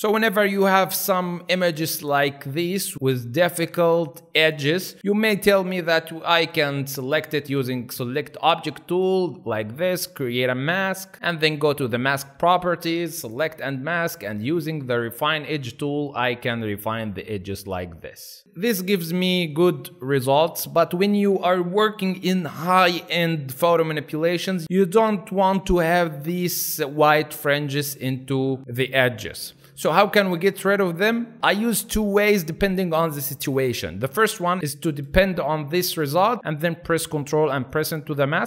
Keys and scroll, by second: 4.1 space, 14.9 alt+space, 18.4 alt+space, 30.1 alt+space.